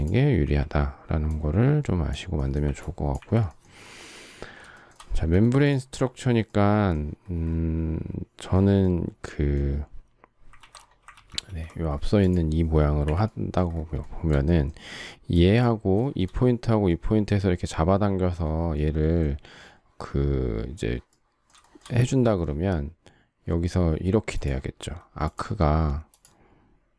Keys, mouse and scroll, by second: 0.3 Delete, 2.6 Delete, 4.7 shift+middle click, 5.9 shift+middle click, 10.5 ctrl+z, 11.1 ctrl+z, 13.0 Delete, 14.0 shift+middle click, 16.1 shift+middle click, 21.6 shift+middle click.